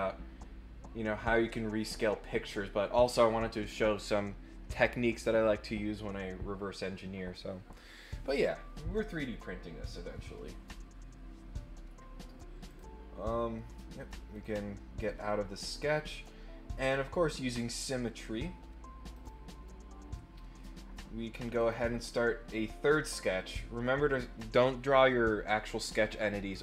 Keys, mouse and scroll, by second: 12.6 click, 14.3 click, 19.1 click, 21.5 click.